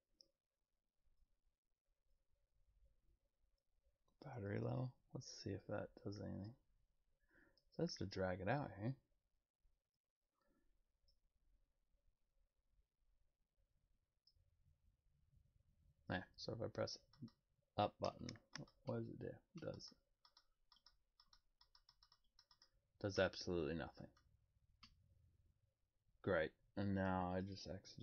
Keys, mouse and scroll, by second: 4.6-6.4 drag, 11.0-14.2 drag.